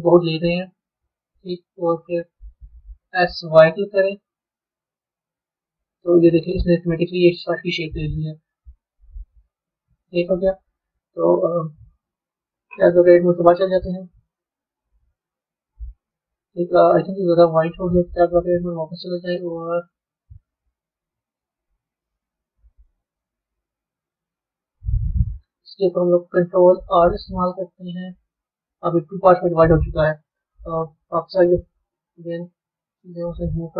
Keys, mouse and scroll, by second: 0.0-1.8 middle drag, 1.8-2.4 scroll down 2, 2.4-3.0 scroll down 1, 6.5-9.5 middle drag, 10.0-12.1 middle drag, 12.1 Tab, 14.2 click, 15.3 click, 16.0-18.2 middle drag, 18.2 b, 18.9-23.2 middle drag, 23.2-24.2 scroll up 4, 24.2-26.7 middle drag, 26.7 ctrl+r, 31.5 click, 33.3 click.